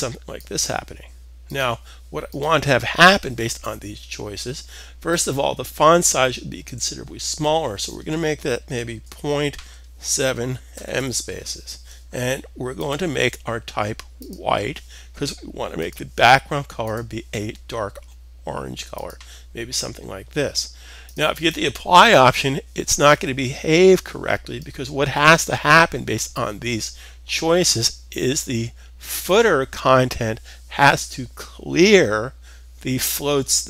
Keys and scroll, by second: 8.4 typing, 9.5-10.9 typing.